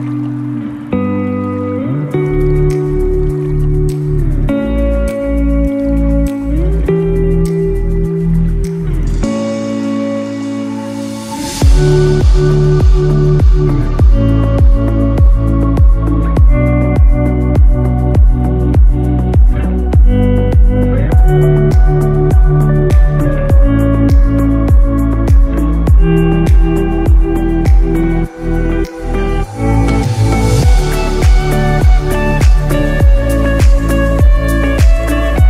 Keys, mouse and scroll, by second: 7.9 scroll up 3, 8.6 scroll down 4, 10.3 shift+middle click, 10.6 middle click, 11.5 scroll up 7, 11.9 s, 12.4 middle click, 13.2 click, 13.8 scroll up 2, 14.2 shift+middle click, 14.7 click, 15.0 scroll down 2, 15.4 shift+middle click, 15.9 middle click, 17.7 scroll down 2, 18.0 middle click, 20.4 click, 24.0 click, 24.7-25.3 scroll up 2, 25.3 shift+middle click, 25.7 middle click, 28.7 middle click, 29.6 KP_1, 30.1-31.2 scroll up 3, 31.2 click.